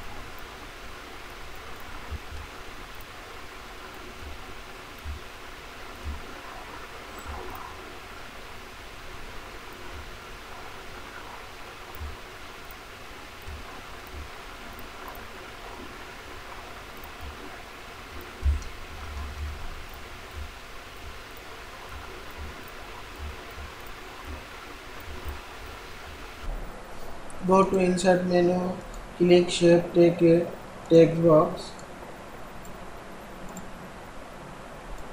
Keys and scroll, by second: 18.8 ctrl+Down.